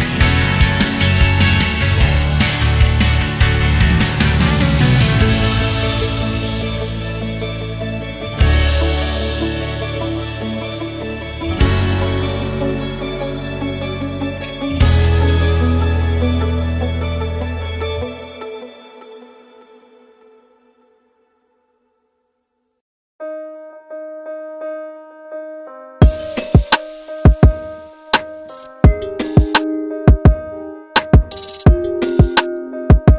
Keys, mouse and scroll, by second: 0.8 scroll down 1, 1.1 alt+click, 1.5 scroll down 2, 1.7 alt+click, 2.0 scroll up 2, 2.2 alt+middle click, 2.5 scroll down 2, 2.8-3.2 alt+drag, 3.3 alt+middle click, 4.2 click, 4.8 middle click, 4.8 scroll down 1, 5.2 middle click, 7.3 click, 10.9-12.6 typing, 13.9 scroll up 1, 14.3 scroll down 1, 14.5 alt+drag, 15.7 click, 16.5 click, 17.2 scroll up 2, 18.0 scroll up 1, 18.8 click, 25.8 click, 26.5 typing, 26.8 Return, 27.5 alt+middle click, 27.5 alt+scroll up 1, 27.8 alt+click, 28.6 alt+middle click, 28.6 scroll down 1, 28.9 shift+right click, 29.9 alt+middle click, 29.9 alt+scroll up 3, 30.2 alt+click, 30.8 alt+middle click, 30.8 alt+scroll down 1, 31.2 alt+middle click, 32.3 scroll down 2, 32.6-33.1 alt+drag.